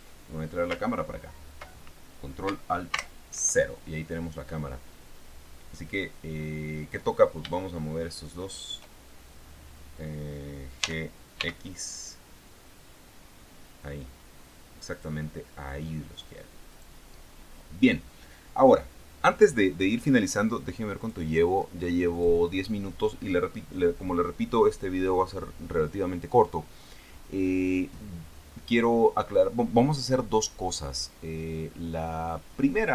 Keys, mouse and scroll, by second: 3.3 ctrl+alt+KP_0, 8.3 shift+right click, 11.1 g, 11.7 x, 15.3 click, 17.1 right click, 21.3 click, 22.5 click.